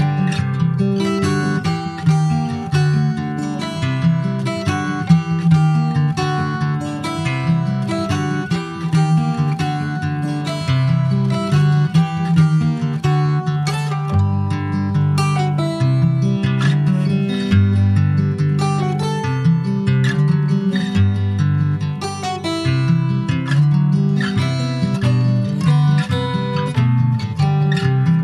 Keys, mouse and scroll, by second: 0.2 click, 0.5 scroll down 2, 0.7 middle click, 1.3 ctrl+s, 1.5 middle click, 2.2 ctrl+s, 2.3 middle click, 3.2 alt+middle click, 3.8 click, 4.5-4.8 scroll up 2, 5.1-6.1 shift+middle drag, 6.1 click, 9.0 click, 9.4 click, 10.6 click, 12.8 click, 13.2 middle click, 13.7 ctrl+s, 13.7 click, 14.7 alt+middle click, 15.4 click, 16.5 click, 19.8 click, 20.1 middle click, 20.7 ctrl+s, 20.8 click, 21.3 ctrl+s, 21.7 shift+a, 23.1 alt+middle click, 23.4 alt+middle click, 24.7 click, 25.8 shift+middle click, 26.1 shift+scroll up 1, 26.4 s, 27.7 alt+middle click.